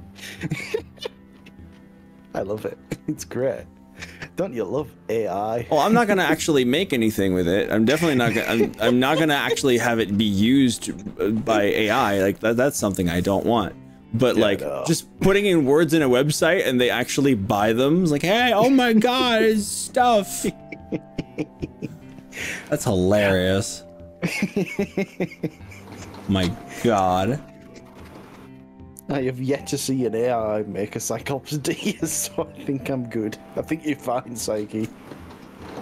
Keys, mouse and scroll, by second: 22.7-30.7 middle drag, 30.7-34.7 drag, 35.4-35.8 middle drag.